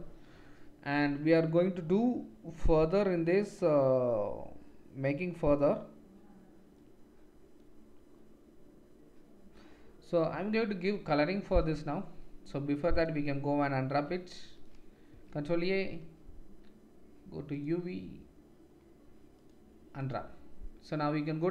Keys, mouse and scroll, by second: 13.9 Tab, 15.1 a, 17.5-21.5 middle drag, 17.5-21.5 right drag.